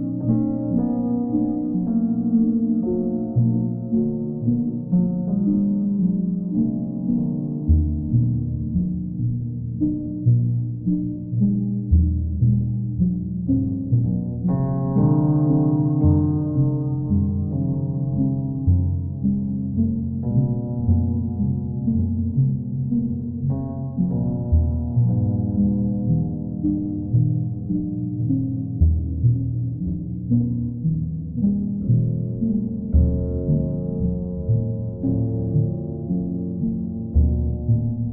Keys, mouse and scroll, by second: 2.5 click, 3.2 ctrl+click, 7.2 q, 8.5 click, 9.3 alt+click, 10.2 click, 11.5 click, 12.2 click, 12.6 alt+click, 15.2 alt+click, 20.0 alt+click, 21.4 right click, 25.8 click, 27.3 click, 29.1 click, 30.9 click, 32.1 click, 32.6 click, 33.2 click, 33.9 click, 34.5 alt+click, 36.3 click, 37.7 click.